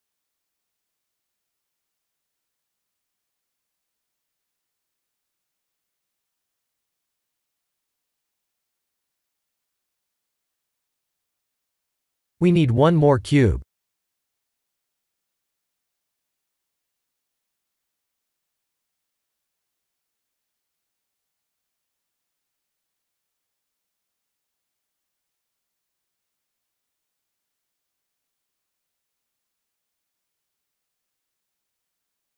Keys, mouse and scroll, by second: 0.3 KP_1, 1.2 shift+z, 1.5-1.9 scroll up 4, 1.9 shift+middle click, 2.7-3.3 scroll up 2, 3.3 shift+middle click, 6.2-7.2 scroll down 8, 7.5 ctrl+r, 10.8-12.6 scroll up 8, 12.6 Tab, 12.6 scroll up 1, 13.6 shift+middle click, 14.4-15.6 scroll down 8, 15.8 click, 16.4 shift+a, 17.8 click, 18.2 s, 20.2 g, 21.9-23.0 scroll up 12, 23.0 s, 24.2 g, 25.4 r, 27.2 s, 28.2 g, 30.1 Tab, 30.5 3, 31.7 click, 31.8 click.